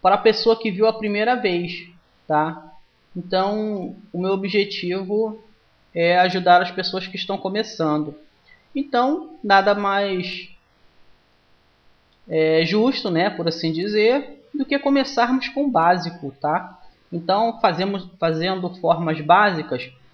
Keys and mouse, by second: 0.0 middle click, 0.9-2.0 drag, 3.5 right click, 4.4-5.4 middle drag, 5.4 click, 6.8 right click, 7.8 middle click, 8.6 click, 8.6 right click, 9.5-12.4 middle drag, 12.4-14.4 right drag, 13.4-15.3 drag, 16.4-18.2 right drag, 18.2 click, 19.3-20.1 drag.